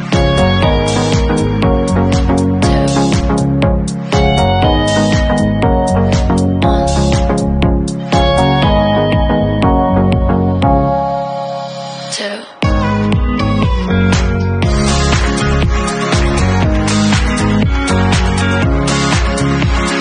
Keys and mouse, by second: 14.7-20.0 drag.